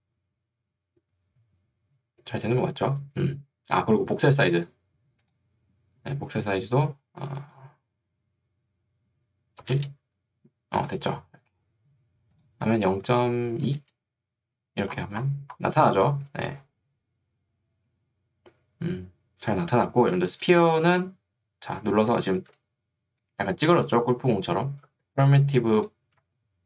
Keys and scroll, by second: 9.8 Return, 13.8 Return, 16.2 3, 22.4 ctrl+2, 23.8 Escape, 25.0 ctrl+2, 26.2 Escape.